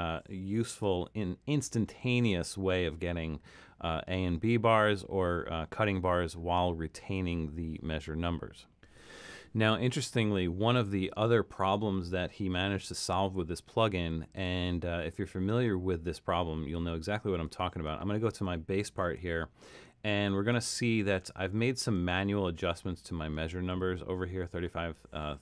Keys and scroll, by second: 1.1 super+-, 1.6 super+-, 19.2 super+=, 19.7 super+=, 20.8 super+=.